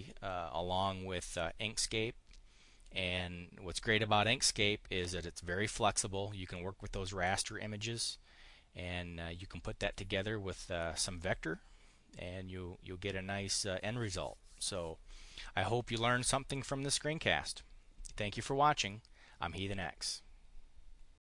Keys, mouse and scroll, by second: 17.1 click, 18.4 click.